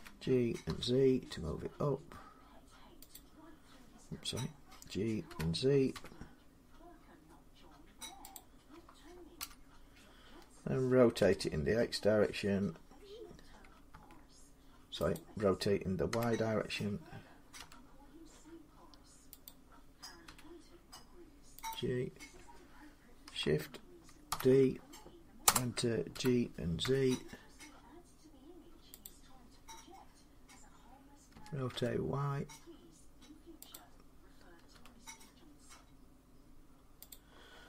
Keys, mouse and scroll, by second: 0.0-0.5 typing, 2.9-8.0 drag, 5.1-6.2 typing, 8.2-13.2 drag, 9.2 1, 11.0 r, 13.7 x, 15.0 click, 15.9 r, 17.4 y, 19.3 click, 20.1 g, 21.5 click, 24.1 shift+d, 25.2 Return, 25.2-31.3 drag, 25.9 g, 26.6 z, 31.1-31.5 typing, 33.5 click, 34.5-36.6 drag, 34.5 r, 34.5 g.